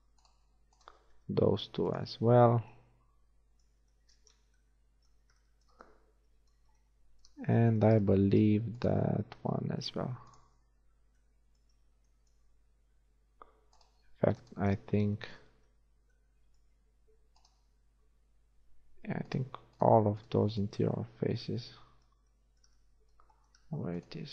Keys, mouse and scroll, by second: 1.3 middle click, 1.3 space, 2.2 middle click, 2.9 middle click, 3.6 middle click, 4.5 Tab, 7.9 shift+Tab, 9.5 space, 11.8 z, 13.5 space, 14.0 click, 15.3 click, 15.7 z, 16.2 middle click, 17.6-19.9 right drag, 19.9-22.4 drag, 21.4 z.